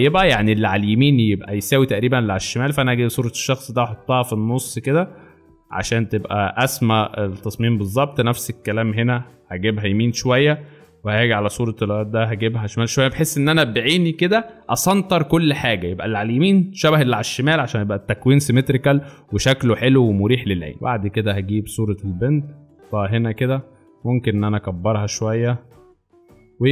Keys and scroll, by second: 0.4 Return, 5.5 Right, 6.4 Right, 6.6 Right, 6.8 Right, 22.6 ctrl+t, 25.7 Return.